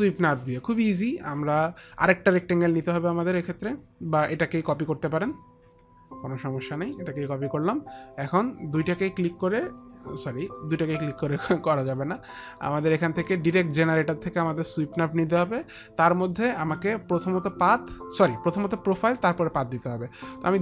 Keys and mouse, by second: 5.3 click, 9.0 ctrl+click, 10.5 ctrl+click, 12.1 ctrl+click, 13.8 click, 16.8 click.